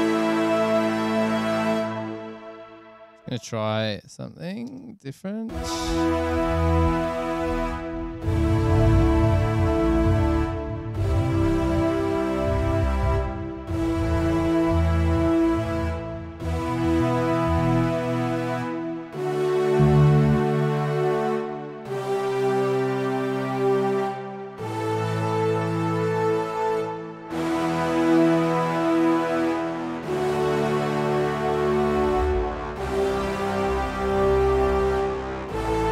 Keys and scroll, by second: 4.1 space, 4.8 space.